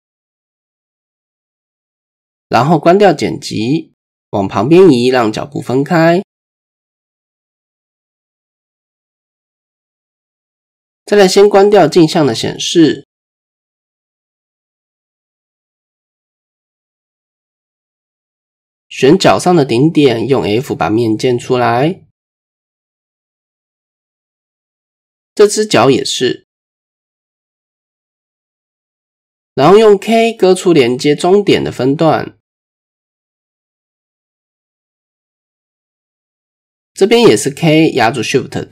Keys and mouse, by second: 0.8 KP_1, 1.3 KP_3, 2.1-2.7 shift+drag, 3.9 click, 4.9-7.0 drag, 7.9 click, 8.3 middle click, 9.1-10.1 middle drag, 10.5 shift+middle click, 12.3 click, 12.6-13.7 middle drag, 13.9 middle click, 14.3 middle click, 15.5 middle drag, 18.1-18.6 middle drag, 22.8 f, 23.6 shift+click, 23.6 shift+middle click, 24.3 click, 26.8 middle click, 28.5 f, 29.0 middle click, 29.8 click, 31.6 k, 32.9 typing, 36.0 shift+click, 37.6 k.